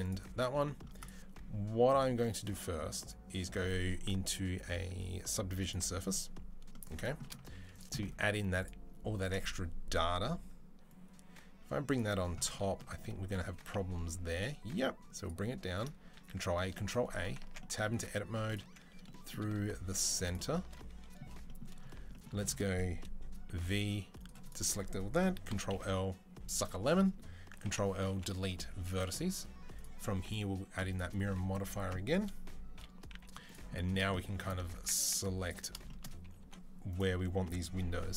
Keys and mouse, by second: 0.8-2.8 middle drag, 2.8-11.8 drag, 7.2 z, 8.0 z, 11.8-13.2 middle drag, 14.4 click, 15.5 click, 16.0 ctrl+a, 16.3 ctrl+a, 17.2 Tab, 17.8 2, 18.3 alt+click, 20.2-24.3 middle drag, 23.3 v, 24.3-26.4 drag, 25.3 ctrl+l, 26.4-29.6 middle drag, 27.4 ctrl+l, 27.9 Delete, 29.6-35.3 drag, 31.6 Tab, 32.5 KP_3, 32.9 z, 34.5 Tab, 35.3-36.7 shift+middle drag, 36.2 3, 36.7 click, 37.5-38.1 middle drag, 37.9 c.